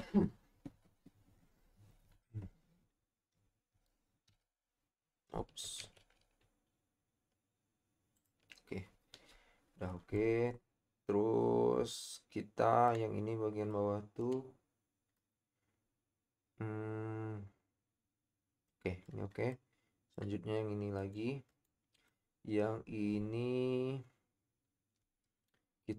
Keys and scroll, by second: 4.5 |, 5.8 ctrl+z.